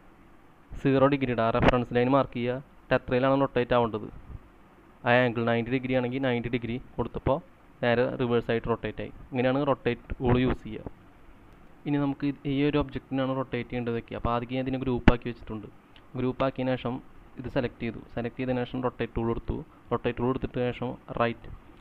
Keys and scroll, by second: 5.1-6.0 typing, 6.2 Return, 7.1 space, 10.3 typing, 11.5 c.